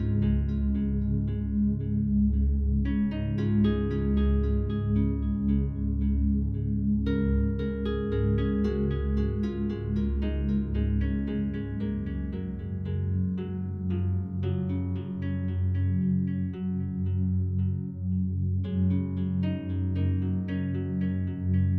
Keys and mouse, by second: 3.6 space, 4.3-8.1 drag, 8.6-9.5 drag, 9.7 g, 10.3 click, 10.6 click, 10.9 space, 11.7 g, 13.0 click, 14.1 click, 15.1 ctrl+s, 16.0-16.6 drag, 17.4 click, 18.2 click, 19.4-21.2 drag.